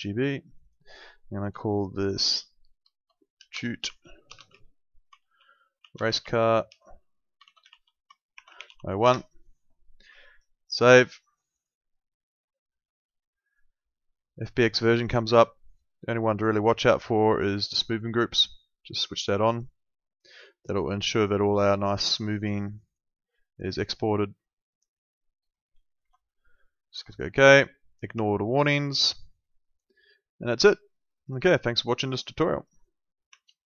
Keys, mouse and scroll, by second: 3.2-9.2 typing, 11.6 click, 16.8 ctrl+2, 26.0 Escape, 27.1 click.